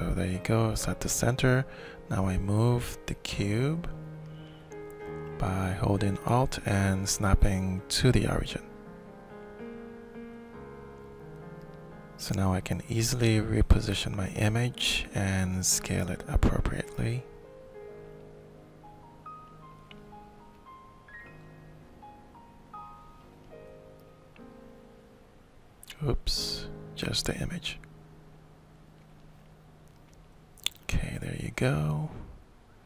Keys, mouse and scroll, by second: 0.8 shift+middle click, 3.5 click, 6.5 alt+click, 8.1 middle click, 8.9-10.0 alt+shift+drag, 11.4-13.2 middle drag, 13.2 click, 13.3-16.5 middle drag, 16.7-17.7 shift+drag, 18.0 shift+click, 19.2 click, 20.0 click, 20.9 shift+middle click, 23.2-24.3 drag, 24.6 ctrl+z, 25.8 ctrl+shift+click, 27.5 click, 28.3-32.1 drag, 32.7-32.8 alt+shift+middle drag.